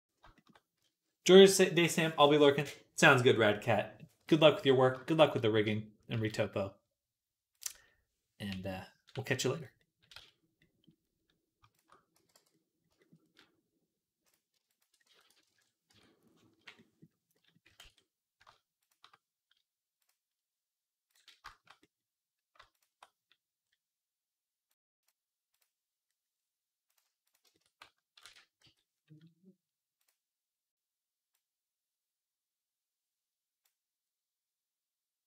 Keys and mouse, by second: 0.1-7.4 shift+middle drag, 0.6 z, 6.0 z, 7.4 click, 7.4-9.4 middle drag, 8.4 /, 9.4 click, 9.5 middle click, 10.0 z, 11.6 shift+click, 12.0 x, 14.5 alt+shift+click, 14.9-17.3 drag, 14.9 s, 15.7 Tab, 16.4 /, 17.7 ctrl+s, 20.6 click, 21.1 shift+middle click, 24.5-26.1 drag, 26.3-27.3 drag, 26.8 right click, 28.1 ctrl+a.